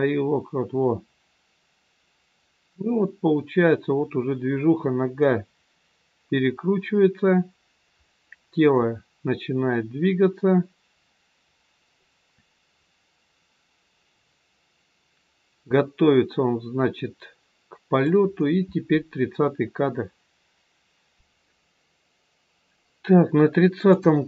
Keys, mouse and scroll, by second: 24.0 click.